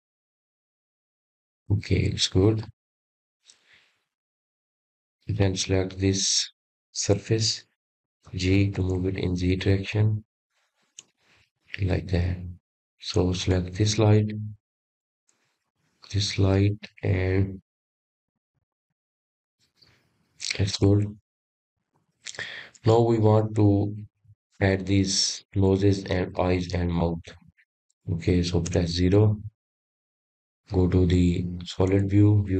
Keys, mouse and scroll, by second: 3.1-4.1 scroll down 6, 5.4 click, 6.5 click, 8.2 click, 8.8 click, 9.6 click, 11.7 g, 14.9 click, 16.9 click, 19.1 click, 32.2 KP_0.